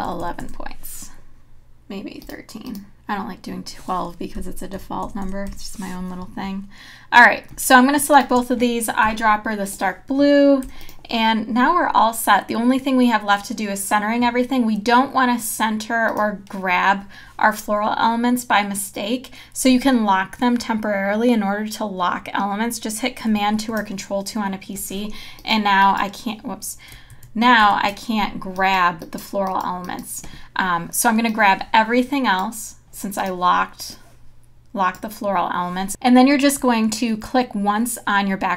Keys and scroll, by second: 0.1 KP_1, 0.9 Return, 4.4 Up, 9.1 i, 10.7 v, 23.5 super+2, 27.1 super+z.